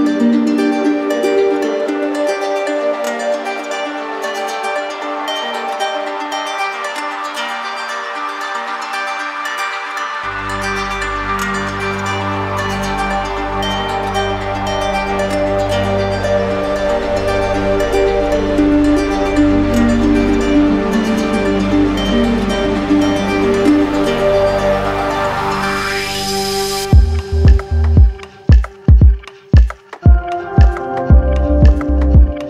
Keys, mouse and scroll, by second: 0.1 alt+click, 1.5 alt+click, 4.7 click, 7.6 ctrl+click, 9.8 click, 11.0 click, 15.1 ctrl+click, 17.6 click, 19.6 click, 21.3 click, 22.0 click, 22.4 shift+click, 23.6 click, 24.8 alt+click, 26.7 alt+click, 27.5 alt+click, 28.3 alt+click, 29.5 z, 31.1 z, 31.7 click.